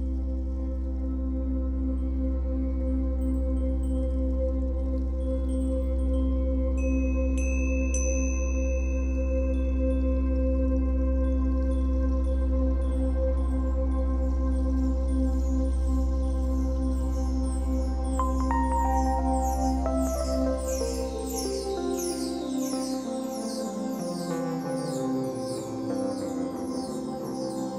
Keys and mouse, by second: 2.3 click, 4.1 g, 4.5 z, 6.0 click, 6.6 alt+click, 8.1 g, 8.6 y, 9.6 click, 10.5 g, 10.8 z, 11.7 click, 13.0-14.6 drag, 14.6-15.0 typing, 15.1 Return, 17.2-22.4 ctrl+alt+drag, 22.4-22.7 typing, 23.9 click, 24.6-26.3 typing, 25.6 click.